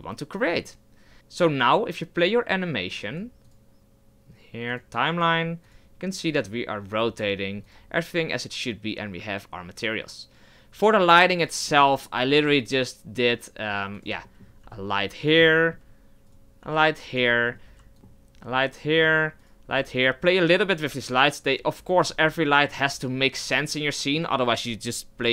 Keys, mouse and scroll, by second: 0.5-1.1 scroll up 1, 1.1 scroll down 1, 1.2 KP_0, 2.5-11.4 drag, 11.4 middle drag, 11.7-12.2 scroll down 6, 14.0 shift+a, 14.2-14.6 middle drag, 14.6 g, 15.4-16.3 middle drag, 16.3 right click, 16.6 g, 17.3-17.7 middle drag, 17.7 g, 17.9 middle click, 18.1-18.7 scroll down 6, 18.9-19.5 middle drag, 19.5 right click, 19.7 g, 20.5 right click, 20.7 g, 21.5 right click, 21.7 g, 22.3-22.9 middle drag, 22.9 g, 23.6-25.3 middle drag.